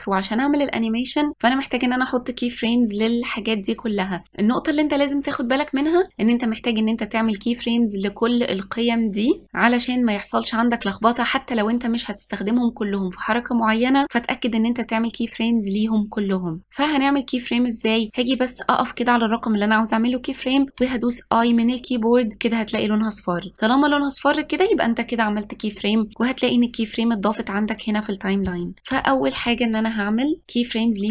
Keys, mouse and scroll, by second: 29.5 i, 30.4 i.